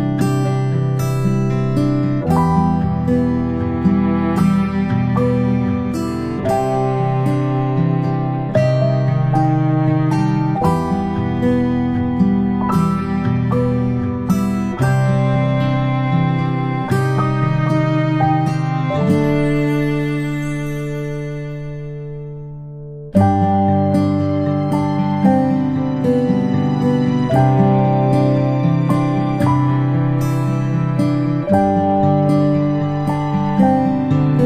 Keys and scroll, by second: 8.8-9.4 ctrl+space, 13.7 ctrl+c, 14.8 ctrl+v, 16.3 ctrl+z, 18.2 ctrl+v, 26.1 ctrl+g, 29.9-30.3 space.